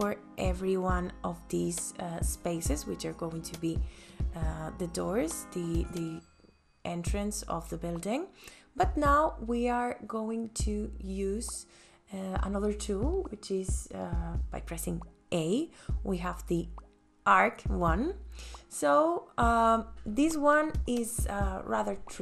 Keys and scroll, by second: 0.0 space, 1.1 ctrl+s, 16.2 a.